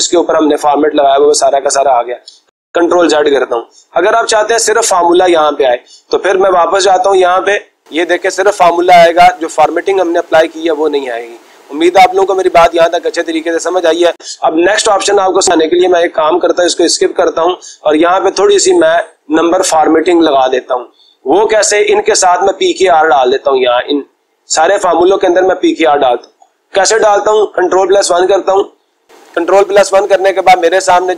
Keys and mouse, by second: 1.3 click, 2.4 ctrl+z, 4.4 click, 5.6-6.6 drag, 7.2 click, 13.2-14.2 drag, 15.2-16.2 drag, 16.7 Escape, 17.9-18.9 drag, 24.6-25.7 drag, 27.7 ctrl+1.